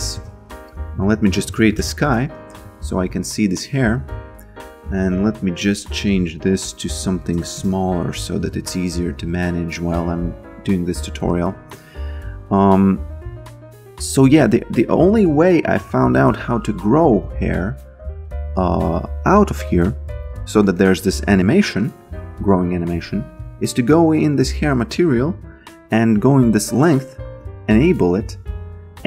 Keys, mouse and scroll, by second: 0.2-2.2 typing, 3.0 alt+right click, 5.1 click, 7.4 BackSpace, 7.5 Return, 8.4 b, 9.4 alt+right click, 9.8 alt+click, 10.3 alt+right click, 10.7 alt+middle click, 11.3 alt+click, 13.1 f, 15.3 a, 15.8 f, 17.1 b, 18.2 alt+right click, 20.8 alt+middle click, 21.9 click, 22.9 ctrl+z, 23.6 click, 26.1 click.